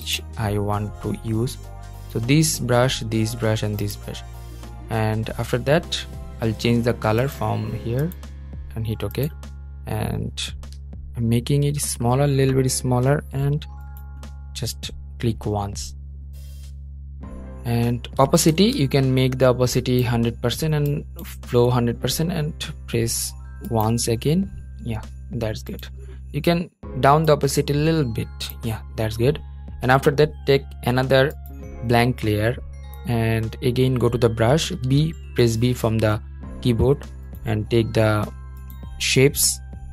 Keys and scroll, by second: 18.3 super+z, 34.9 b.